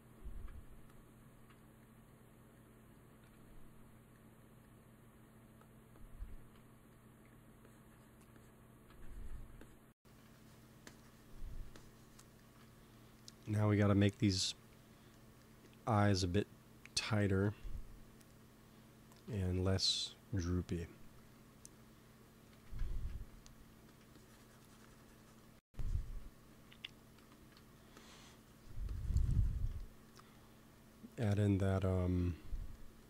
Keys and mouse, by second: 3.1 KP_1, 5.5-7.2 drag, 7.1 f, 7.5-8.5 drag, 9.8-13.4 drag, 14.2 KP_1, 22.5 x, 23.7 f, 24.1-27.5 drag, 26.3 f, 27.1 i, 27.7-30.6 drag, 31.1 KP_1, 32.2 click.